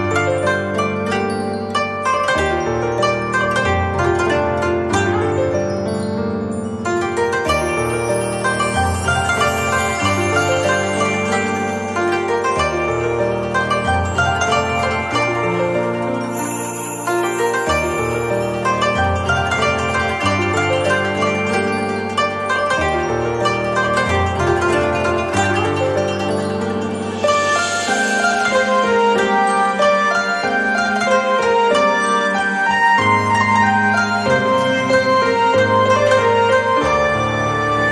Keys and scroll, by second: 13.8 ctrl+z, 14.4 ctrl+z, 21.3 ctrl+c, 30.6 ctrl+shift+[.